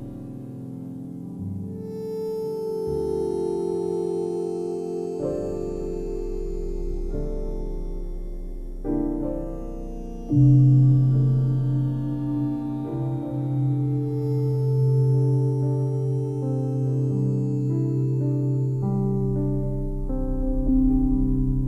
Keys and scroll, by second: 0.0 ctrl+j, 6.1 ctrl+j, 14.1 ctrl+e, 15.9 ctrl+j, 21.0 ctrl+alt+z.